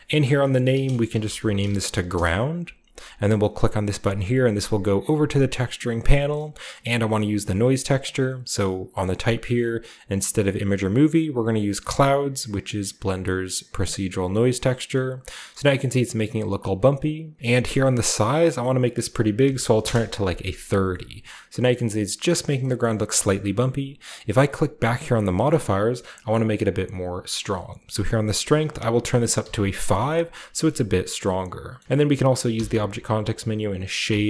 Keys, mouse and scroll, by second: 0.7-2.6 typing, 5.0 click, 10.1 click, 13.7 click, 15.7-16.2 scroll up 1, 18.2 click, 18.6-19.8 drag, 19.4 typing, 19.8 Return, 20.6-21.7 scroll down 1, 21.7-24.0 scroll up 1, 24.7 click, 26.5 click, 28.5 click, 29.4 5, 29.8 click, 30.4-31.5 scroll down 1, 31.8-32.1 scroll down 1, 31.8-33.0 typing, 32.1-34.2 scroll up 1.